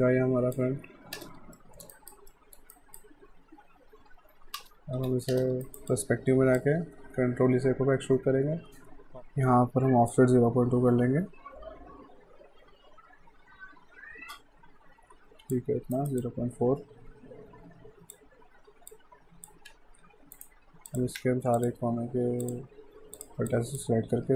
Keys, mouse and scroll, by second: 1.2 space, 1.6 alt+middle click, 2.0 alt+right click, 2.3 middle click, 2.7 right click, 4.6 space, 5.0 f, 5.3 space, 5.7 alt+right click, 5.9 alt+click, 8.1 ctrl+e, 10.1 click, 15.9 alt+right click, 16.2 alt+click, 18.9 click, 19.7 q, 20.3 right click, 20.9 click, 21.6 shift+click, 23.5 alt+click, 24.1 r.